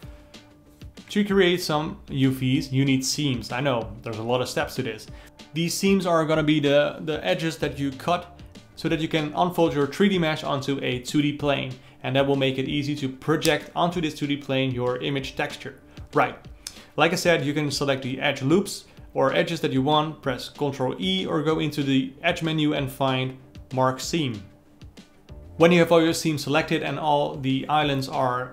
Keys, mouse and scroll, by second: 0.0 ctrl+alt+middle click, 0.3 2, 0.4 alt+click, 0.4-2.2 ctrl+alt+middle drag, 2.2 alt+shift+click, 2.3 alt+middle click, 3.2 ctrl+shift+click, 3.7-4.8 alt+middle drag, 4.8 shift+click, 5.0 alt+middle click, 5.8 alt+shift+click, 5.9-7.4 ctrl+alt+middle drag, 7.4 alt+shift+click, 7.9 ctrl+z, 8.0 alt+shift+click, 8.1-9.2 ctrl+middle drag, 9.4 ctrl+alt+middle click, 9.6 c, 9.8 ctrl+e, 10.0 alt+a, 10.2 alt+click, 10.3 alt+middle click, 10.9 alt+shift+click, 10.9 alt+middle click, 11.1 alt+shift+click, 11.4 alt+shift+click, 11.5 alt+shift+click, 11.8 alt+shift+click, 12.1 alt+shift+click, 12.5 ctrl+e, 12.6 ctrl+alt+middle click, 12.8 alt+a, 12.9-16.2 alt+middle drag, 16.2 a, 17.4 click, 17.8 a, 22.8 n, 24.7 alt+a, 25.0-26.5 alt+middle drag, 26.5 alt+click, 26.8 alt+middle click, 27.4 ctrl+e, 27.6 ctrl+middle click, 27.6 alt+a, 27.7 alt+middle click.